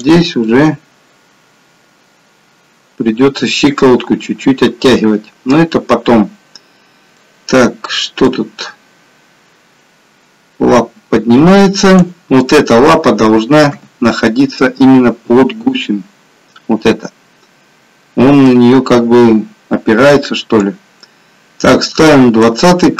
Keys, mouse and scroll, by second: 0.6 middle click, 5.0 middle click, 8.5 click, 13.8 KP_3, 20.9 click.